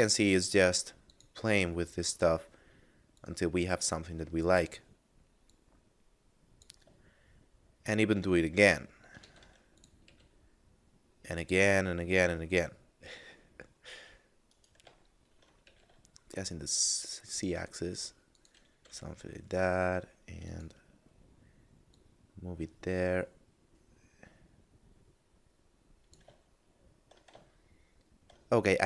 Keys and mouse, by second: 1.1 click, 3.1 click, 5.5 click, 7.1 shift+middle click, 8.3 middle click, 9.1 shift+d, 9.8 click, 10.1 r, 14.4 right click, 15.1 shift+middle click, 15.7 r, 15.9 z, 18.1 click, 18.9 g, 19.0 z, 20.5 click, 26.5 shift+middle click, 27.5 shift+middle click.